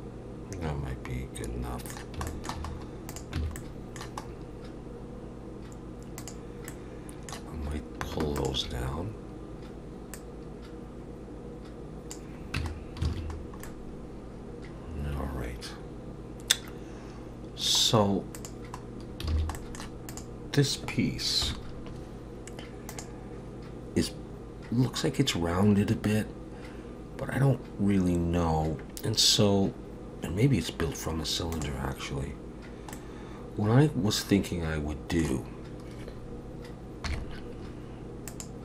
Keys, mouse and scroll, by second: 2.3 shift+middle click, 2.7-3.1 scroll up 1, 3.1 click, 3.4 Tab, 3.6 middle click, 4.2-5.4 scroll up 3, 6.2 click, 6.7 middle click, 8.4 shift+click, 10.1 click, 12.6 Tab, 12.7-14.5 scroll down 6, 13.1 alt+a, 13.7 middle click, 18.3 click, 18.8-19.3 scroll down 2, 19.3 alt+a, 19.6 middle click, 20.1 click, 21.4 KP_1, 32.9 middle click, 37.1 KP_3, 38.3 click.